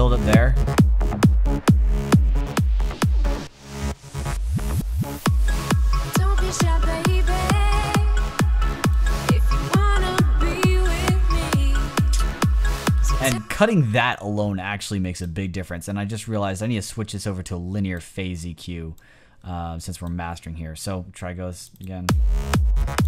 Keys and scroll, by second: 13.2 space.